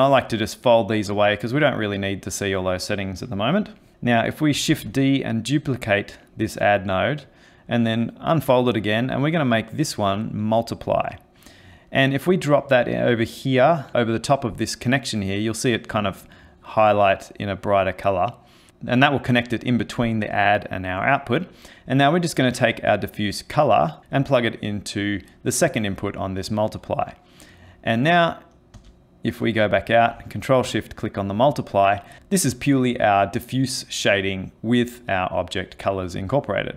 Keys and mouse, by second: 1.2 click, 1.8 click, 3.9 click, 4.7 shift+d, 7.3 click, 8.8 click, 11.7 click, 18.7 click, 22.0 click, 25.9 click, 28.8 ctrl+space, 30.4 ctrl+shift+click.